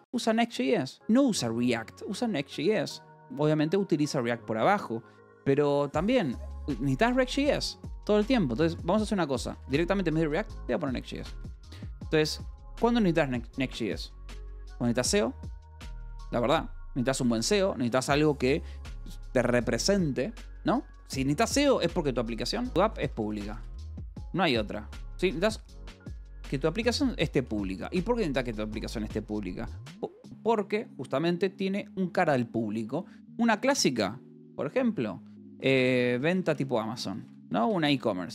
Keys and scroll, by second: 0.0 j, 0.1 Escape, 7.7-12.9 typing, 8.9 Escape, 14.8-17.2 typing, 22.2-24.1 typing, 25.2-27.5 typing, 35.3-38.3 typing.